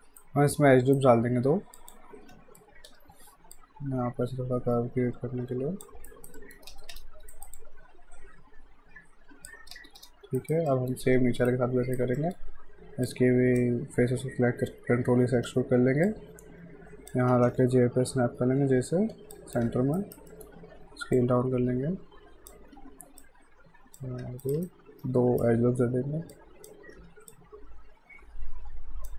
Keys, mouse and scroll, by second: 0.2 shift+right click, 1.8 click, 2.2-3.4 typing, 3.5 click, 6.1 alt+right click, 6.4 alt+middle click, 6.7 space, 7.3 alt+right click, 7.6 alt+click, 9.7 space, 10.4 alt+right click, 10.7 alt+middle click, 10.8-11.2 alt+scroll up 2, 11.5 right click, 12.2 alt+middle click, 13.0 click, 14.9 e, 16.1 click, 17.3 r, 19.1 j, 19.3 click, 20.0 alt+right click, 20.3 alt+middle click, 21.2 click, 22.7 w, 23.2 click, 24.2 q, 24.4 right click, 24.6 shift+right click, 26.3 click, 26.9 w, 27.3 click.